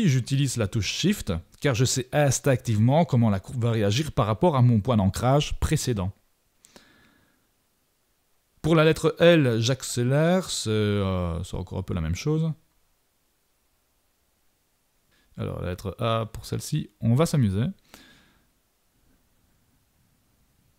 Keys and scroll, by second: 11.4 shift+super+=, 16.3 super+-, 17.6 super+=.